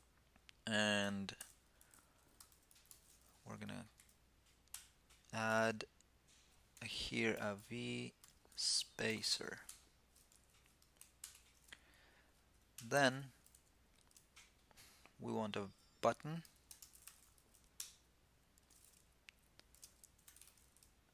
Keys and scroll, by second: 3.4 super+Right.